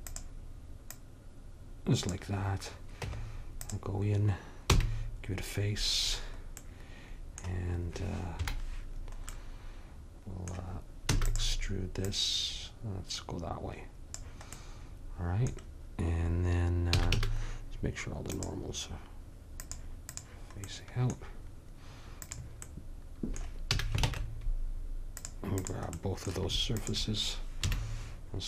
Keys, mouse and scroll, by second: 1.0-2.8 drag, 3.1 Tab, 4.8 f, 8.5 KP_Decimal, 11.2 e, 12.1-14.0 drag, 17.0 a, 17.2 a, 22.3-24.1 drag, 23.8 a, 24.1 ctrl+Tab, 25.7-28.4 drag, 27.7 KP_1.